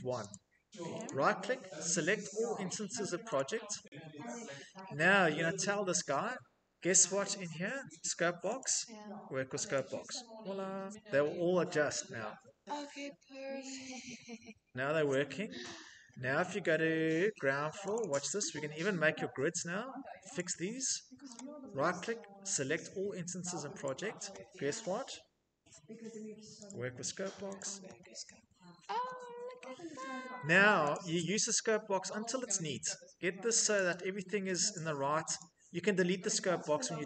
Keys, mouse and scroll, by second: 4.2 scroll, 4.7 scroll, 8.4 click, 9.5 click, 11.7 scroll, 15.4 shift+middle click, 17.7 click, 17.8 click, 19.0 middle click, 19.0 middle click, 19.1 middle click, 20.1 click, 21.1 right click, 23.6 click, 26.4 click, 27.3 click, 28.7 middle click, 28.8 middle click, 29.3 Escape, 29.5 Escape, 29.7 Escape, 30.0 middle click, 30.1 middle click, 30.7 click, 33.2 Escape, 33.5 click, 34.5 click, 35.7 click, 36.0 Escape, 36.5-36.9 scroll.